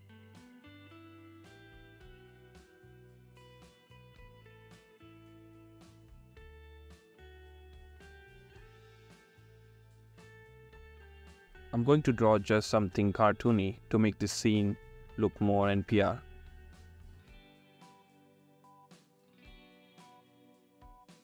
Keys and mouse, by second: 0.7 ctrl+z, 2.7 ctrl+z, 4.1 ctrl+z, 4.4 ctrl+z, 5.1 ctrl+z, 10.9 ctrl+z, 12.3 ctrl+z, 13.3 ctrl+z, 13.4 ctrl+z.